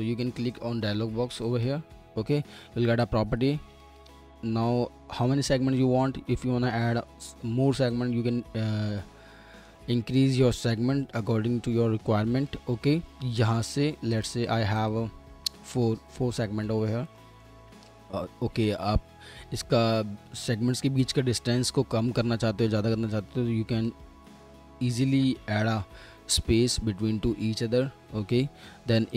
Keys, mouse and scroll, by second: 4.1 middle click, 13.0 ctrl+z, 14.3 double click, 24.8 ctrl+z.